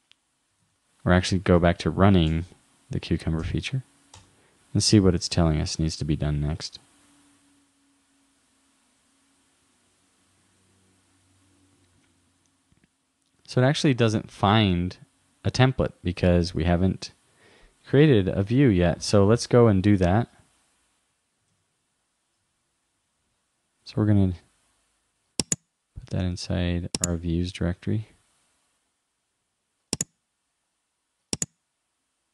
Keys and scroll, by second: 0.7 super+Tab, 21.5 super+Tab.